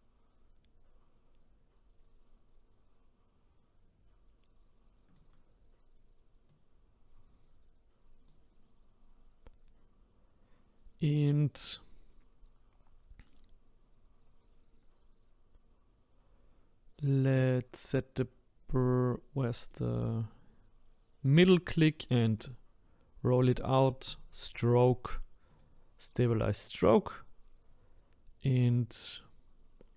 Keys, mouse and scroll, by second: 6.5-9.6 drag, 19.7-22.7 middle drag, 24.0-27.1 drag, 29.2-29.9 drag.